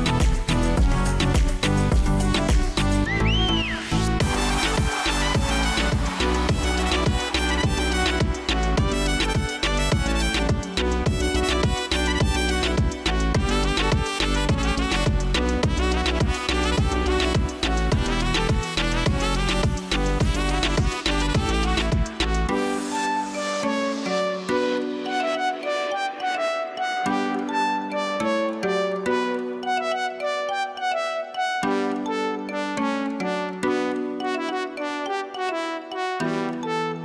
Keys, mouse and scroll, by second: 3.3 ctrl+z, 24.3 ctrl+v, 26.7 ctrl+v, 27.4 ctrl+z, 30.0 ctrl+z, 36.9 alt+click.